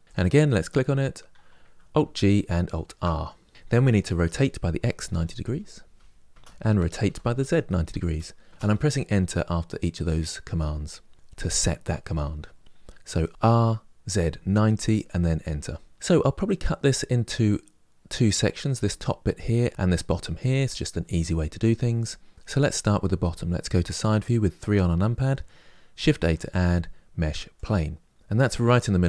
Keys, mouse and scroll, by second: 0.0 click, 1.7 alt+g, 2.4 alt+r, 4.0 r, 6.8 r, 15.9-17.9 middle drag, 24.4 KP_3, 27.3 shift+a.